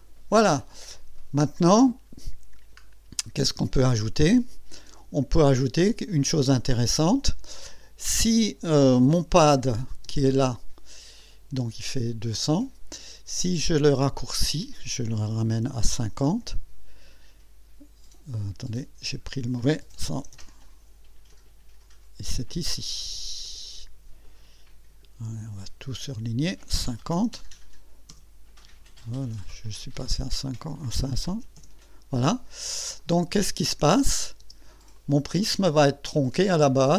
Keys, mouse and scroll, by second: 0.9-1.8 drag, 2.1 scroll up 1, 2.5-2.8 scroll down 2, 3.2-3.8 right drag, 4.0 click, 5.4 click, 9.7 click, 10.0 space, 10.6 space, 11.2-12.8 drag, 14.3 click, 15.5 KP_5, 15.9 KP_0, 16.4 KP_Enter, 18.7 click, 19.8 KP_1, 20.1 KP_0, 21.3 click, 23.4 click, 24.2 click, 25.6 click, 27.0 KP_5, 27.1 KP_0, 28.1 KP_Enter, 30.0 click, 31.1 KP_5, 31.3 KP_0, 31.6 KP_Enter, 33.0 click, 34.1 click, 34.4 space, 35.0 click, 35.7 click, 36.7-36.9 drag.